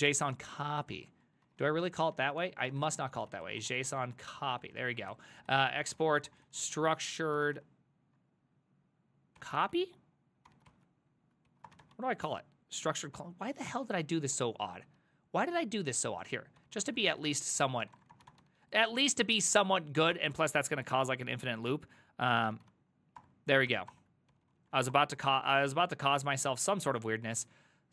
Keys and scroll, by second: 0.0-8.1 typing, 2.4 ctrl+c, 9.2-20.2 typing, 14.4 ctrl+o, 20.4 Left, 20.6 Left, 20.9 Left, 21.3 ctrl+w, 22.1-27.9 typing, 23.2 Return, 23.7 ctrl+c, 24.0 Return.